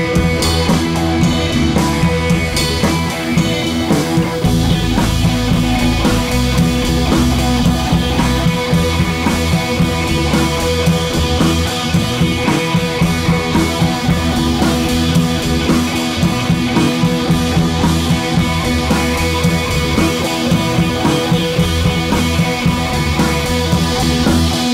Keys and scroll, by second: 8.3 BackSpace, 8.7 BackSpace, 20.8 Down, 21.0 Page_Down, 21.1 Down, 21.3 Left, 21.6 Down, 23.3 super+d, 23.6 Down, 23.7 Down, 23.9 Down, 24.0 Down.